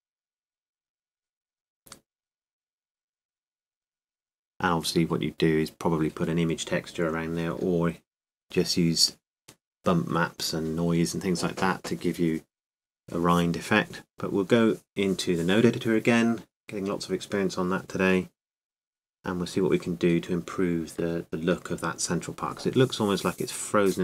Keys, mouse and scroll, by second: 14.0-17.0 drag, 17.5-19.1 drag.